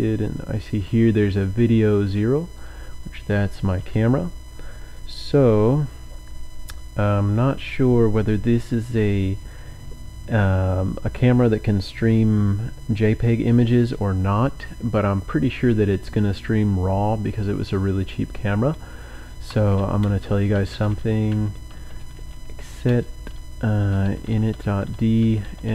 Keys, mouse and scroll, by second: 0.0-1.2 drag, 2.7 click, 19.3-25.7 typing.